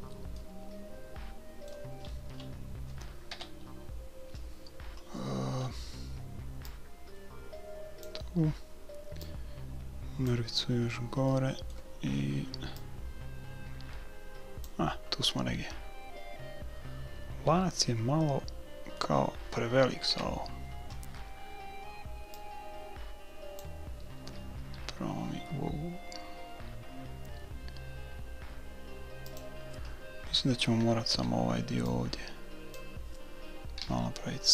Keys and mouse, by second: 2.1-4.2 middle drag, 3.3 KP_2, 3.4 KP_3, 5.6-6.7 middle drag, 6.7 click, 7.6-8.7 drag, 9.2-11.1 drag, 11.1 middle click, 12.5 middle click, 12.8-14.6 drag, 12.9 right click, 15.3-16.8 middle drag, 16.9 middle click, 20.1 KP_1, 22.4-24.4 drag, 24.6 s, 30.5 a, 31.1 b, 33.8 s.